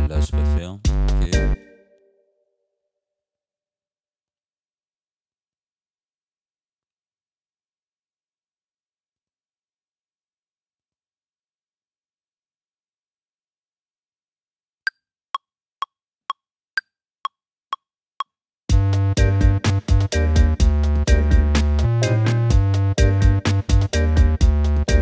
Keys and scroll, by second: 0.8 space, 4.3 Delete, 7.2 F9.